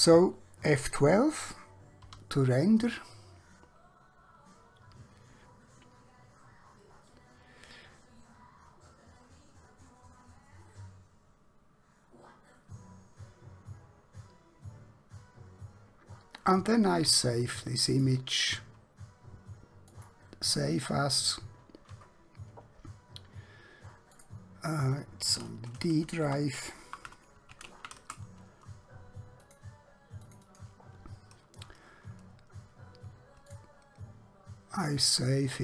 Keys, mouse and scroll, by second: 2.2 F12, 18.0 click, 24.2 click, 26.2-26.8 typing, 28.0 Return, 29.5 click, 33.5 click.